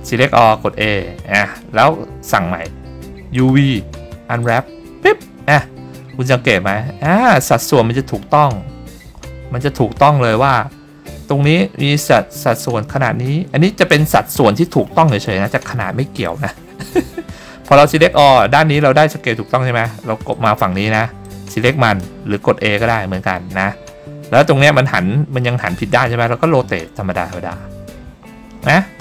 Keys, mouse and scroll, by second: 0.7 a, 3.5-4.7 drag, 20.5 click, 21.4-22.2 drag, 22.9 a, 27.0 r.